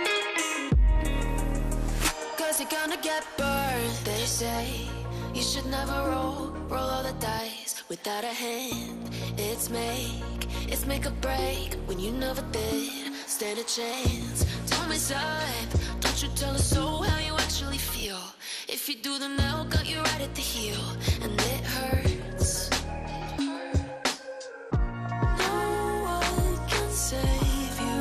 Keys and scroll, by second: 2.6 space, 10.9 Delete, 13.8 Delete, 20.3 e, 21.1 Escape, 21.3 F2, 22.2 Escape.